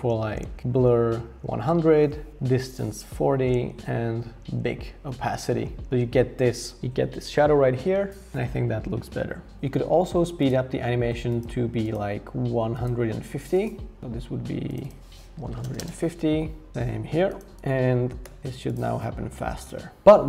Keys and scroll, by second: 0.6 shift+Up, 2.1 shift+Up, 2.3 shift+Up, 3.5 shift+Up, 3.7 shift+Up, 4.4 shift+Up, 5.5 shift+Down, 5.6 shift+Down, 5.8 shift+Down, 15.2-16.1 typing, 18.2 r.